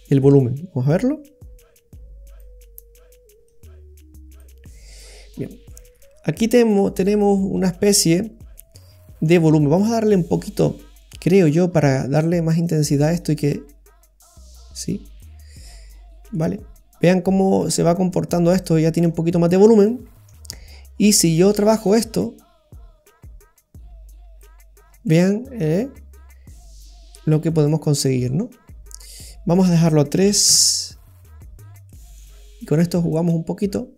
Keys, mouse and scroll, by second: 0.9 click, 3.5 click, 5.3-6.6 scroll up 2, 5.7 middle click, 9.6-10.4 scroll down 3, 9.8 middle click, 10.4-11.1 scroll up 8, 11.1 middle click, 11.4-11.8 scroll up 3, 12.6 click, 15.6-17.2 scroll up 4, 16.3 middle click, 19.4-19.8 scroll down 4, 19.8 middle click, 20.4-21.8 scroll up 8, 21.8 click, 24.8-26.2 scroll down 2, 25.0 middle click, 29.1 click, 29.4 click, 31.5-31.9 scroll down 2, 31.9 middle click, 33.3 click.